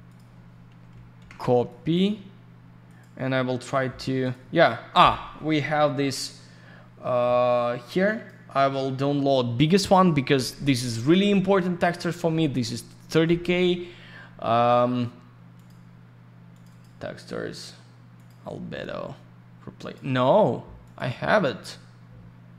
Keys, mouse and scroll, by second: 0.1 click, 0.1 click, 1.2 ctrl+c, 1.7 click, 2.9 click, 3.0 click, 4.5 click, 5.4-6.1 scroll down 1, 8.1 click, 15.5 click, 16.5 click, 16.7 click, 18.1 click, 19.8 click, 20.8 click.